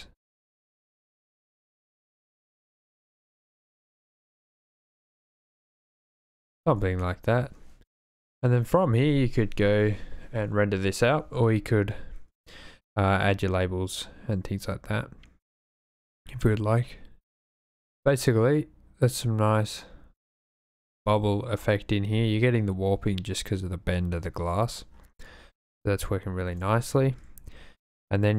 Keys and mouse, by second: 5.7 shift+click, 6.7 super+s, 11.3 d, 27.1 super+s.